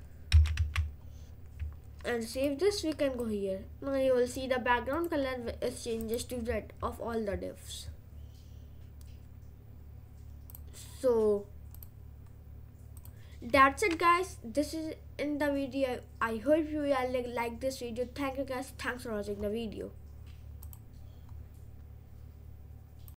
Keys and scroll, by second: 0.4 ctrl+z, 0.5 ctrl+s.